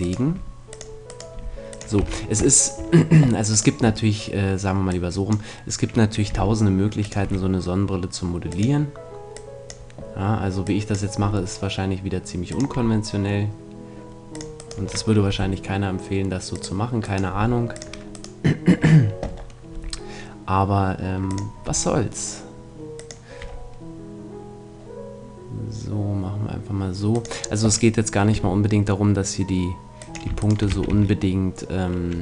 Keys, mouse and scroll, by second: 0.3 g, 1.3 g, 2.0 a, 2.6 middle click, 5.4-6.6 drag, 6.3 g, 7.1-12.5 drag, 7.2 e, 11.2 e, 12.5-14.3 drag, 12.7 e, 14.4-17.3 drag, 14.6-16.6 right drag, 15.3 g, 17.0 right click, 17.3 g, 19.8 g, 21.7 e, 23.1-24.9 drag, 23.4 e, 27.2-28.9 drag, 28.3 e, 30.4-32.1 right drag, 30.7 f, 30.9 a, 32.1 middle click.